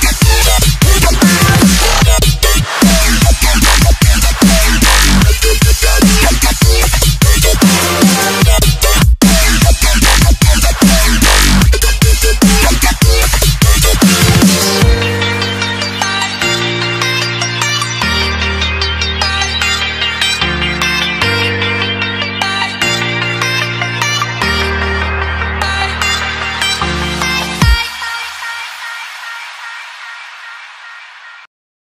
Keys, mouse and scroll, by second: 0.2-0.6 alt+scroll down 2, 0.6-1.6 alt+scroll up 3, 1.6 Tab, 1.9 click, 3.3 Tab, 3.6 click, 4.5 click, 4.9 Tab, 5.9 alt+click, 7.7 click, 8.7 click, 8.9 alt+scroll down 1, 10.0 click, 10.2 alt+scroll up 1, 10.9 click, 11.0 alt+scroll down 2, 15.1 click, 28.0 click, 29.3 click.